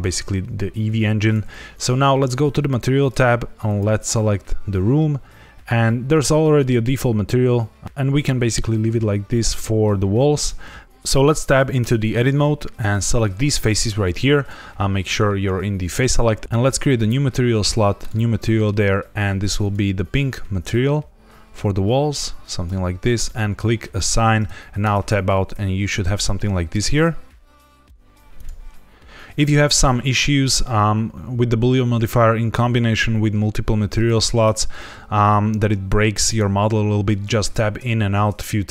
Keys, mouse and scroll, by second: 2.5 click, 3.6 click, 7.8 click, 10.8 ctrl+s, 11.7 Tab, 12.7 click, 13.4 shift+click, 16.4 ctrl+z, 16.8 click, 17.9 click, 19.5 click, 23.2 click, 24.8 Tab, 25.5 ctrl+s, 34.0 Tab, 34.4 Tab, 37.4 Tab, 37.9 ctrl+s.